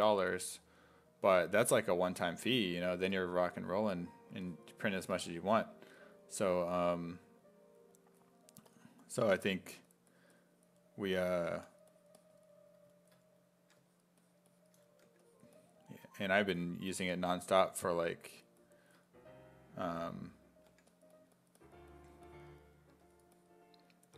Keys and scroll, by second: 11.1 s, 11.6 1, 13.6 1, 15.1 1, 16.1 1, 20.0 s, 20.7 1, 22.9 1, 24.0 1.